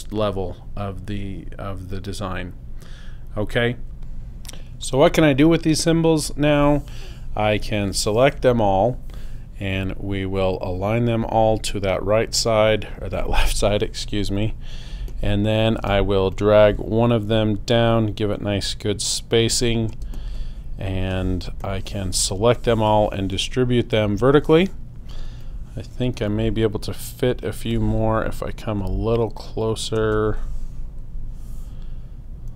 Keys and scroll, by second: 14.9 space, 20.2 shift+space, 21.0 space, 26.2 space.